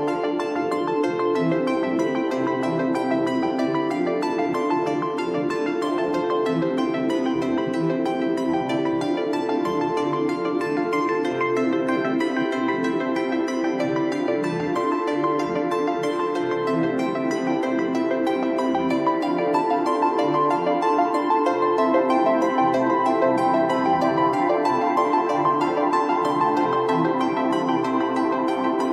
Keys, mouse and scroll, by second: 1.4 n, 1.8-2.4 middle drag, 2.4 click, 2.8 shift+a, 8.0-9.1 scroll up 1, 9.1 click, 10.4-11.7 middle drag, 11.7 shift+a, 17.1 p, 20.6 click, 21.9 shift+a.